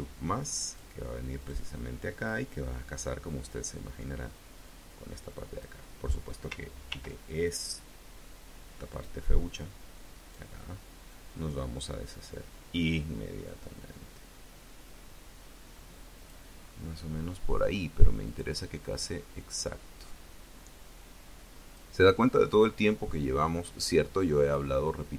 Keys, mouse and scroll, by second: 0.5 click, 1.3 click, 2.1-5.7 drag, 6.7 ctrl+r, 7.3 ctrl+click, 8.7 click, 10.0 click, 10.9-16.3 drag, 16.5-17.1 scroll up 2, 18.1-21.8 drag, 22.3-24.5 drag.